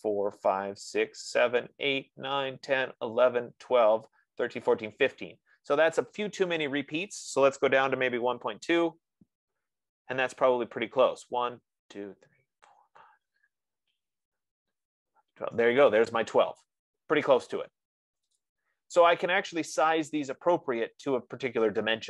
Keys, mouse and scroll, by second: 8.2-9.2 typing, 18.8-19.8 drag, 20.6 scroll, 21.9 F15.